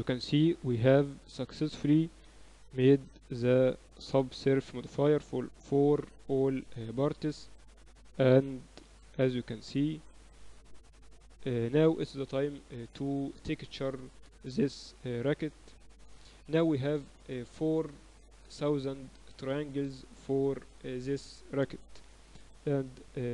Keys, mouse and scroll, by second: 0.3-2.0 drag, 3.1 s, 4.4 z, 4.6 Tab, 5.5 KP_2, 5.7 KP_2, 5.9 KP_2, 8.5 z, 9.2 a, 10.0 b, 11.1 z, 11.6 middle click, 12.2-14.3 drag, 13.1 Tab, 13.7 ctrl+s, 15.9 KP_2, 16.7 KP_6, 20.9-23.3 middle drag, 22.1 ctrl+s.